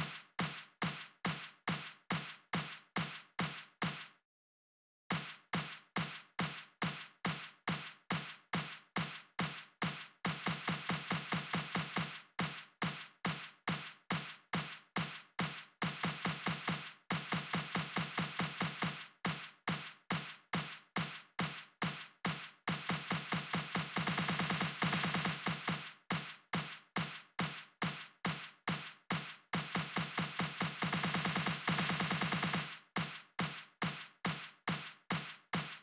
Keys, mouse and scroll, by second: 3.1 click, 4.1 click, 6.3 click, 7.8 click, 8.7 click, 11.3-13.9 drag, 15.2 click, 16.0 click, 16.7 click, 19.5 click, 20.3 click, 21.3 click, 22.1 click, 22.9 click, 24.8 click, 26.5 click, 27.2 click, 33.4 click, 34.7 click.